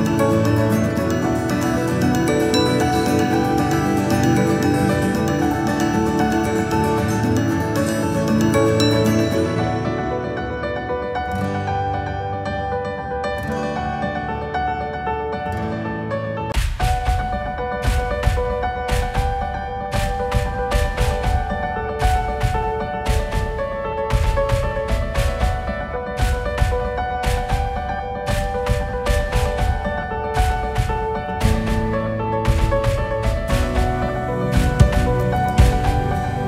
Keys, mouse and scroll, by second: 2.0 g, 6.4 KP_3, 6.9 click, 9.7 click, 10.7 g, 13.4 shift+d, 17.5 click, 19.1 shift+d, 28.5-29.0 shift+drag, 29.8 s, 34.4 click, 35.5 s.